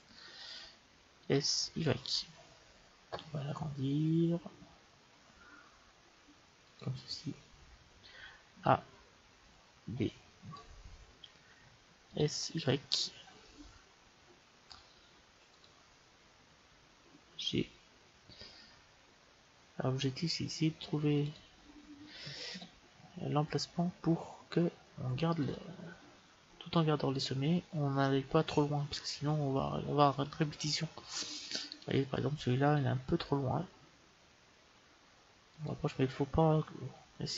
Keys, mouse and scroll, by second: 1.1 s, 8.4 a, 9.7 b, 12.0 s, 17.2 g, 22.4 s, 31.6-33.5 right drag, 33.1 g.